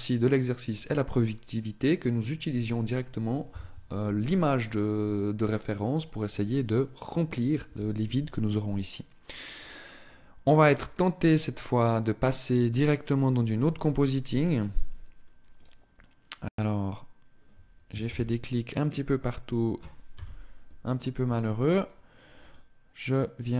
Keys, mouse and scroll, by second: 13.6 Escape, 15.5 click, 17.6 shift+c, 19.8 KP_0, 22.4 click.